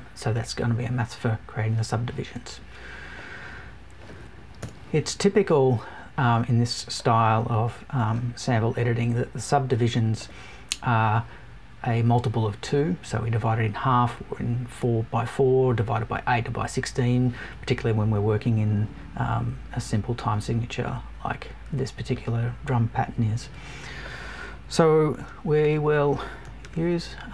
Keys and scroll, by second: 4.5 BackSpace.